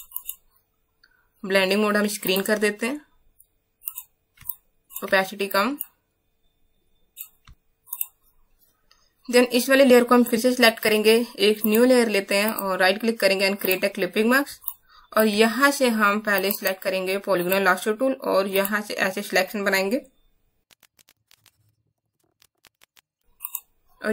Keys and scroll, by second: 4.4 space, 7.4 space, 14.5 space, 22.2 BackSpace, 22.3 BackSpace.